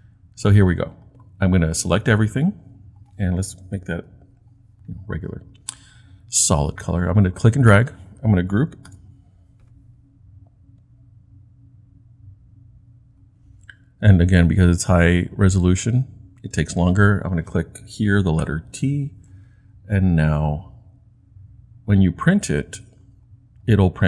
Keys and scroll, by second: 3.9 t, 8.8 super+g, 18.4 t.